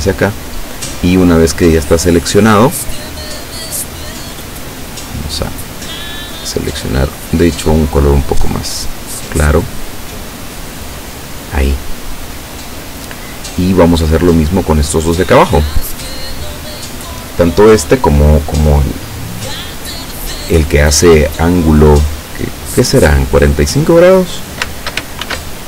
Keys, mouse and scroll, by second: 5.2 click, 6.0-7.2 drag, 7.4-10.3 drag, 11.3 click, 15.8 click, 16.5 click, 25.3 ctrl+shift+f.